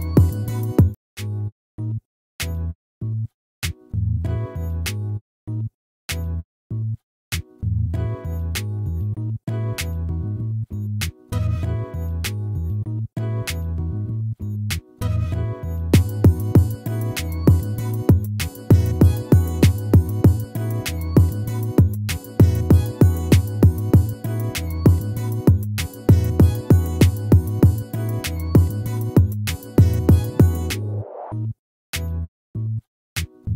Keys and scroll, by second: 10.5 ctrl+-, 16.6 ctrl+z.